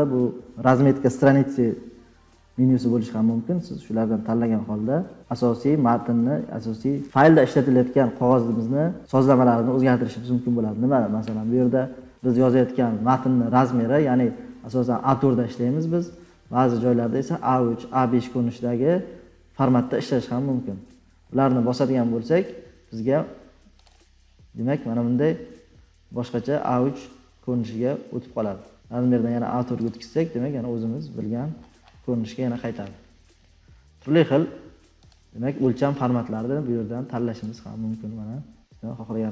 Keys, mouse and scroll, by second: 23.8 click, 25.9-29.0 scroll, 29.0 click, 29.8 click, 30.8-32.6 scroll, 35.3-37.9 drag.